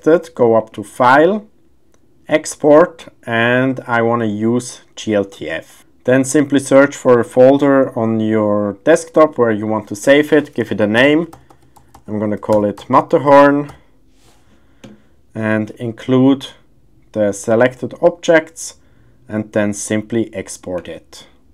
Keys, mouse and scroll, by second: 0.6-5.8 drag.